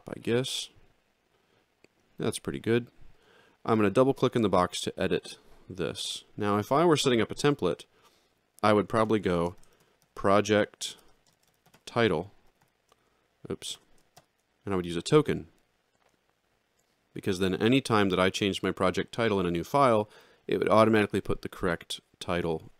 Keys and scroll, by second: 9.0 shift+[, 9.7 r, 11.1 t, 11.5 i, 12.5 shift+2, 14.2 shift+].